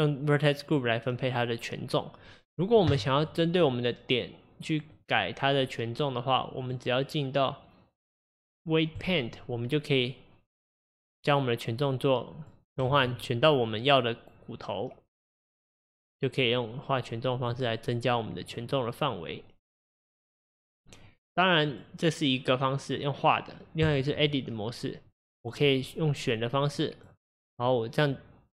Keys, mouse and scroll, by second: 5.0 click, 6.7-9.7 drag, 10.7-13.0 drag, 13.0 ctrl+z, 13.8 click, 16.4-18.6 drag, 19.2-24.7 drag, 25.1 click, 26.8 click.